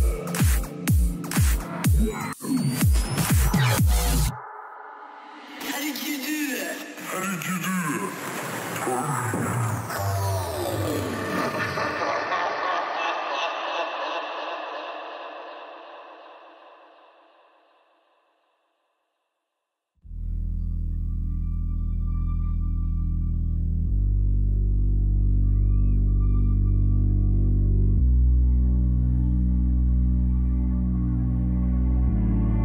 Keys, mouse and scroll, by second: 4.0 Tab, 4.5-7.1 middle drag, 8.8 a, 9.0 a, 9.5 right click, 10.4-12.2 middle drag, 12.3-16.3 middle drag, 15.4-17.5 drag, 16.6 a, 17.1-18.2 middle drag, 17.1-18.2 right drag, 19.3-21.0 drag, 21.1 click, 21.4 a, 21.7-23.5 right drag, 22.6-24.7 drag, 23.8 a, 24.3-26.2 right drag, 25.3-27.2 drag, 27.2 middle click, 27.7 a, 28.2-32.6 right drag, 29.1-32.6 drag, 30.1 a.